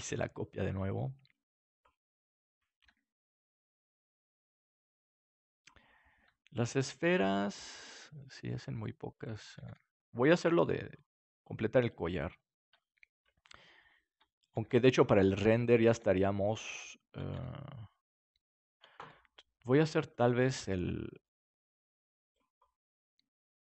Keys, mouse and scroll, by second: 0.1 g, 1.8 click, 2.4 right click, 2.8 g, 6.2-7.2 drag, 7.5 shift+d, 9.6 click, 9.6 shift+d, 14.5 shift+d, 15.9-18.5 drag, 15.9 shift+d, 17.3 shift+d, 18.9 click, 18.9 shift+d, 20.4 shift+d, 22.3 click, 23.1-23.6 middle drag.